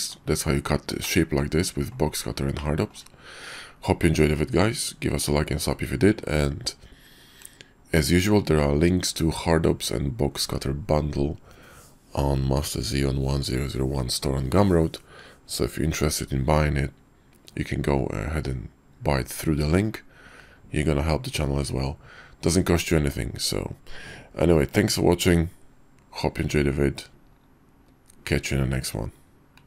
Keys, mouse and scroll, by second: 1.0 middle click, 2.0-2.9 shift+middle drag.